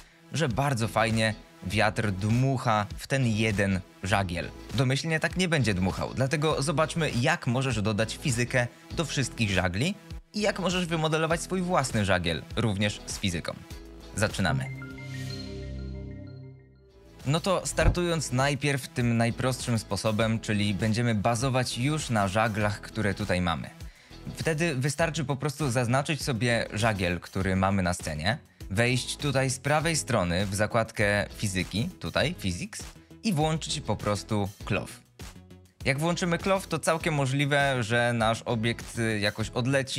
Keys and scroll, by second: 17.5 ctrl+s, 26.3 g.